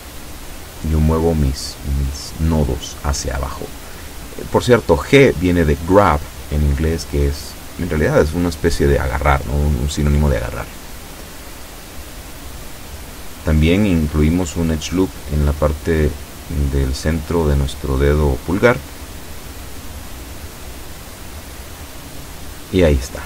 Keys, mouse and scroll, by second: 0.0 click, 0.7 shift+middle click, 2.0 shift+scroll down 2, 2.5 shift+middle click, 5.8 ctrl+r, 6.9 click, 7.4 click, 9.1 a, 9.5 b, 10.0 click, 11.8 b, 12.1 click, 14.5 g, 16.1 click, 16.9 shift+middle click, 17.7 shift+middle click, 19.8-20.8 middle drag, 20.9 scroll down 2, 21.3-22.4 middle drag, 23.1 a.